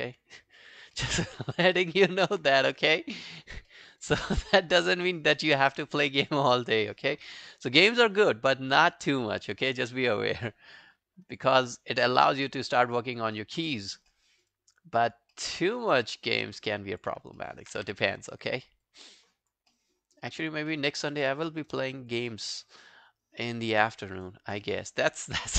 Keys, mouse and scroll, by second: 0.1 alt+click, 0.4 alt+middle click, 0.6 alt+right click, 1.0 alt+middle click, 1.1 alt+scroll down 1, 1.2 alt+right click, 1.4 alt+click, 1.8 alt+middle click, 2.0 alt+right click, 2.2 alt+click, 2.9 alt+middle click, 3.2 alt+right click, 3.4 alt+click, 3.7 alt+middle click, 3.9 alt+right click, 4.2 alt+click, 4.7 right click, 6.3 shift+click, 11.8 double click, 12.0 alt+scroll down 2, 12.3 alt+middle click, 12.5 alt+right click, 12.7 alt+click, 13.4 alt+middle click, 13.6 alt+right click, 13.8 alt+click, 14.1 alt+middle click, 14.3 alt+right click, 14.6 alt+click, 15.4 alt+middle click, 15.7 alt+click, 16.1 right click, 17.4 alt+middle click, 17.8 q, 18.1 scroll down 2, 18.3 alt+middle click, 18.6 alt+scroll up 2, 18.9 alt+click, 19.7 alt+middle click, 20.0 alt+scroll down 2, 20.2 alt+click, 20.7 alt+middle click, 21.2 alt+click, 21.5 alt+middle click, 21.7 alt+right click, 21.9 alt+click, 22.3 alt+middle click, 22.5 alt+right click, 22.8 alt+click, 23.7 alt+middle click, 24.1 alt+scroll down 2, 24.3 alt+click, 24.8 alt+middle click, 25.3 alt+click.